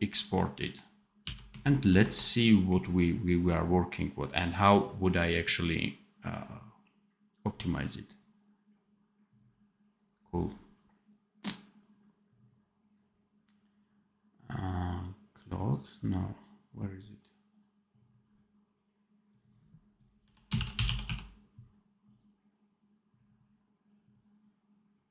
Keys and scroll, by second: 1.1 d, 1.8 ctrl+e.